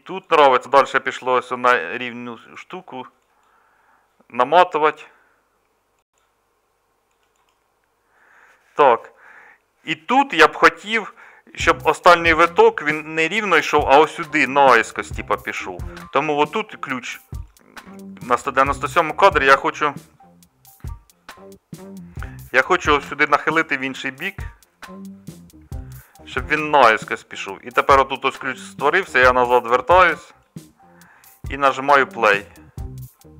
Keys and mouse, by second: 0.0-6.4 middle drag, 23.6 r.